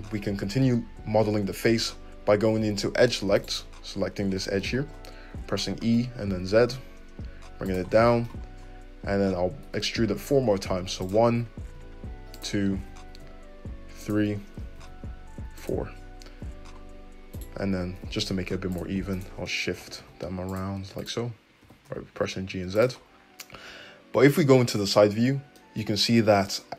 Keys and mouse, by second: 2.9 2, 3.3 click, 3.4 middle click, 3.8-8.6 drag, 5.3 e, 8.6 middle click, 9.1 e, 11.3 e, 12.8 e, 14.5 e, 17.3 click, 17.9-19.1 middle drag, 17.9 g, 19.1 click, 19.2-21.0 middle drag, 19.7 g, 21.0 click, 21.0-26.7 middle drag, 21.6 g, 24.7 `.